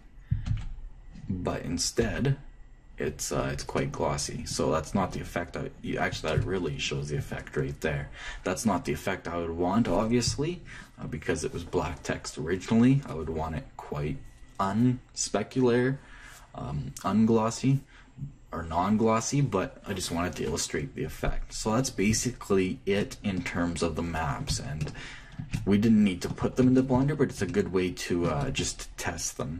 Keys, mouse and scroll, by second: 1.3 m, 2.8 m, 4.5-7.7 middle drag, 8.4-14.5 middle drag, 23.7-24.8 middle drag.